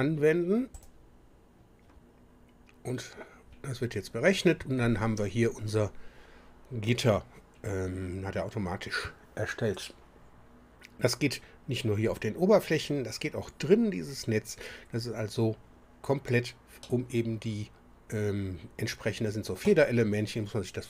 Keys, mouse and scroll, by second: 0.7 click, 16.8-19.7 middle drag.